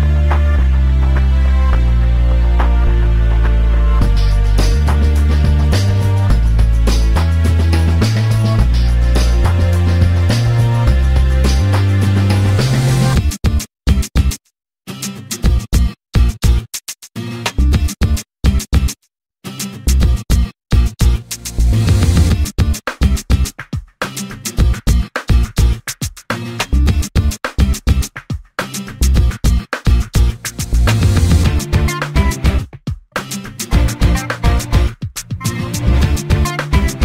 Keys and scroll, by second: 12.0 space, 13.6 m, 16.8 5, 17.4 Return, 19.3 space, 21.7 m, 25.0 space, 30.4 f, 34.0 2.